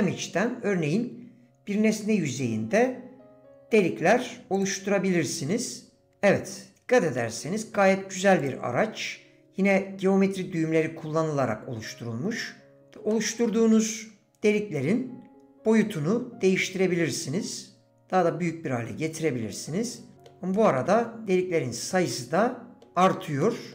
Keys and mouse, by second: 6.1-7.2 middle drag, 8.4 click, 13.1 middle click, 16.0-20.0 drag, 20.1 middle click, 20.5 middle click, 21.9 middle click, 23.0 click, 23.1 middle click, 23.4 middle click.